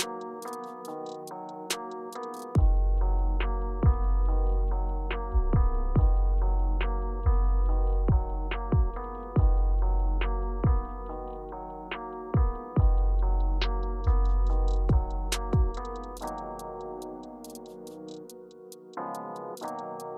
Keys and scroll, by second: 2.6 Return, 3.6 Up, 5.0 Return, 5.6 Down, 5.7-6.5 typing, 10.2 Tab, 11.1 Down, 11.4 Left, 11.6 Left, 12.0 Up, 17.1 Return, 19.7 Left.